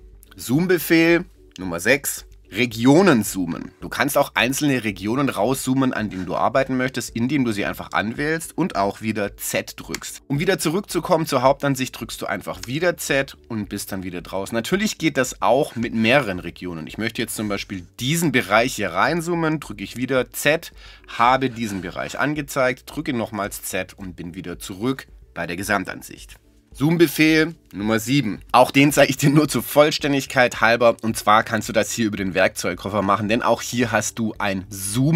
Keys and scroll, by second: 10.0 z, 12.6 z, 19.8 z, 23.2 z.